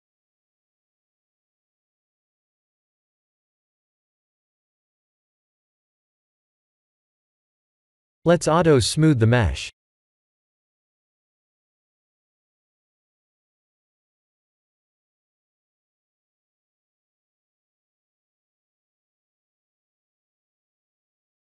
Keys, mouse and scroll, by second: 1.1 Tab, 1.9 g, 5.4 Tab, 5.9 middle click, 7.6 click, 8.8 click, 9.7 click, 10.2 click, 10.6 scroll down 5, 11.1 middle click, 11.8-12.4 scroll down 6, 12.5 shift+middle click, 13.2 KP_1, 13.8-14.7 scroll up 5, 15.9 click, 16.7 click, 17.3 click, 17.7 g, 20.6 click.